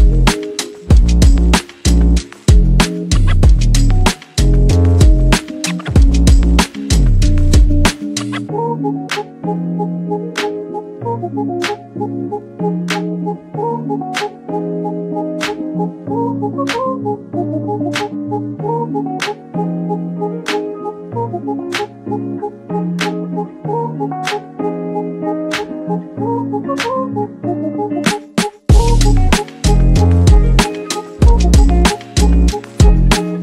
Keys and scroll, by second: 1.7 ctrl+v, 22.9 ctrl+c, 25.7 ctrl+v.